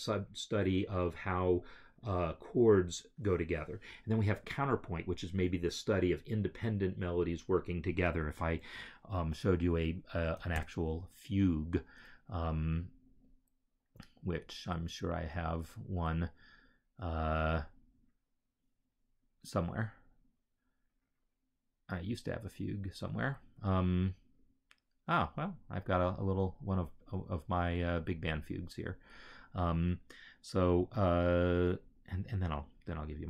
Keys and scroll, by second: 11.2 ctrl+o.